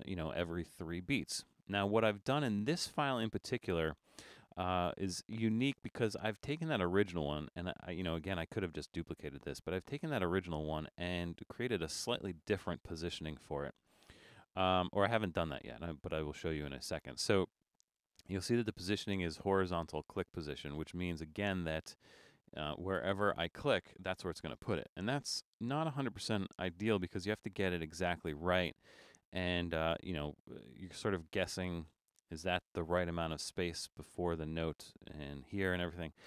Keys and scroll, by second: 24.3 super+=, 24.9 super+=.